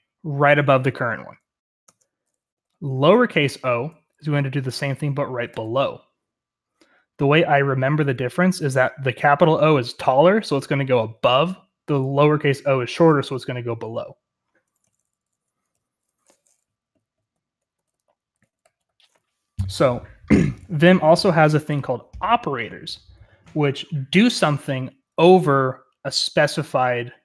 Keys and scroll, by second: 1.8 Escape, 2.5 j, 5.4 o, 14.8 Escape, 14.9-15.7 typing, 17.2-19.4 typing, 20.4 typing.